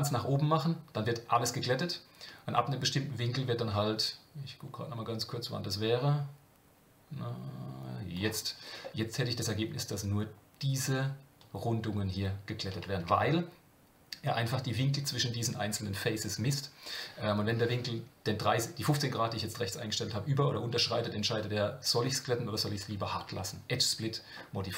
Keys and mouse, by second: 8.8-9.4 middle drag, 13.0 Tab, 23.3 Tab.